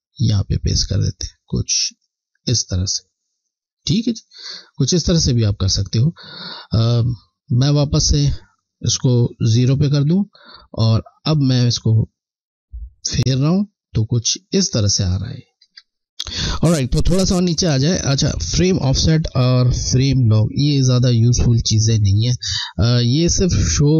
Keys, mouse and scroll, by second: 7.9 click, 11.9 click, 15.8 ctrl+z, 22.1 scroll.